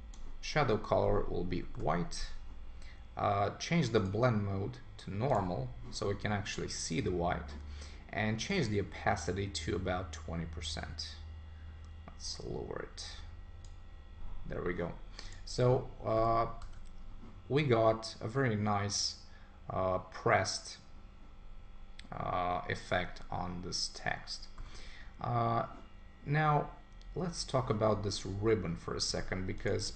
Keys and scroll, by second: 1.8 Return.